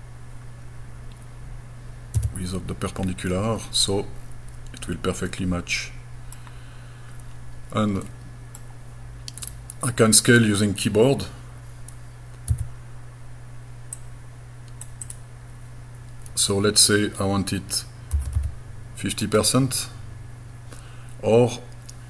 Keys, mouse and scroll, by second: 2.2 p, 3.7-6.3 middle drag, 8.1 middle click, 9.4 right click, 11.5 scroll up 2, 12.6 s, 14.0 click, 15.1 click, 18.2 KP_Decimal, 18.4 KP_5.